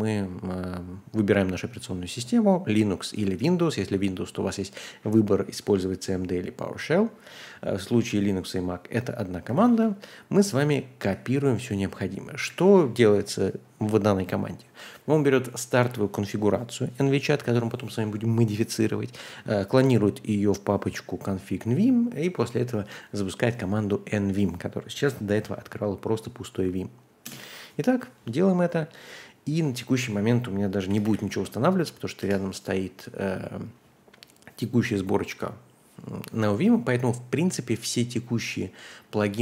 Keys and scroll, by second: 9.4 ctrl+Tab, 11.1 super+v, 12.4 Right, 27.2 Return, 30.5-31.5 typing, 32.2 Return.